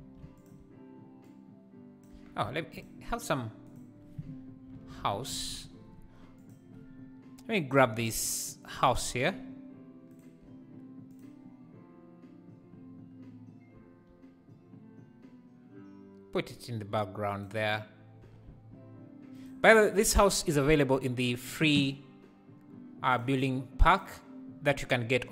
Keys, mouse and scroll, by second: 0.0 1, 0.4 alt+click, 1.2 click, 2.2 Tab, 2.5 x, 5.4-9.4 drag, 10.1-12.5 shift+right drag, 12.5-13.7 drag, 13.7 s, 18.7 r.